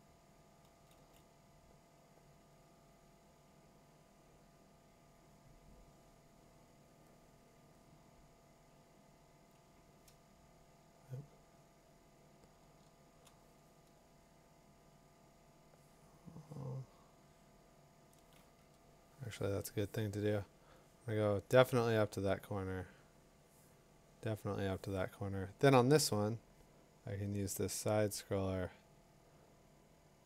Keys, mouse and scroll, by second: 0.9 2, 9.4-15.7 drag, 18.2-21.4 drag, 18.7 Tab, 22.9 click, 24.6 click, 25.8 click.